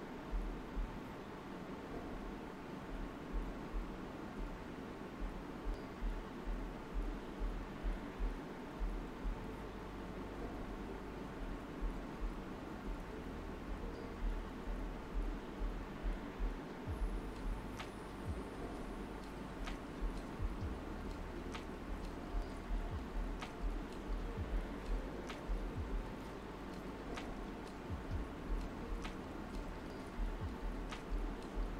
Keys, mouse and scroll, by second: 0.9 shift+d, 2.9 shift+d, 4.6-7.8 right drag, 8.2-10.0 typing, 9.2 alt+right click, 11.2 click, 13.6 right click, 14.4 shift+click, 15.5 shift+click, 16.5 alt+right click, 21.1 shift+Num_Lock, 21.1-21.7 typing, 21.4-22.7 shift+drag, 22.7 alt+right click, 23.5 shift+click, 24.0 right click, 25.8 alt+right click, 27.0-29.8 typing, 28.0 alt+right click, 28.5 click, 29.4 alt+right click, 29.9 click, 30.3 alt+right click, 30.9 space, 31.1-31.7 drag.